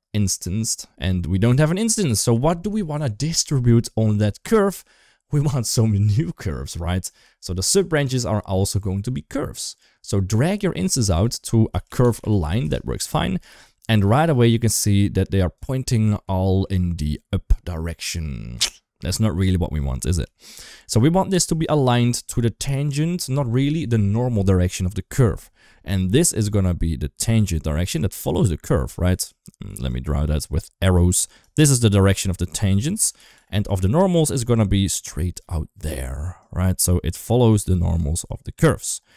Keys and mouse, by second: 0.1 shift+middle click, 10.1 click, 10.4-13.7 drag, 14.2 click, 15.1 click, 16.2 shift+middle drag, 19.7 shift+middle drag, 22.8 shift+middle drag, 25.9 d, 26.2-28.7 drag, 28.7-32.3 typing, 29.1 ctrl+z, 29.7 click, 30.2 click, 30.9 click, 31.4 click, 32.0 drag, 32.6 ctrl+z, 33.0 ctrl+z, 33.2 ctrl+z, 33.4 ctrl+z, 33.8 d, 34.4 click, 34.4-38.1 d, 36.2-37.3 drag, 38.1 click, 39.0 d.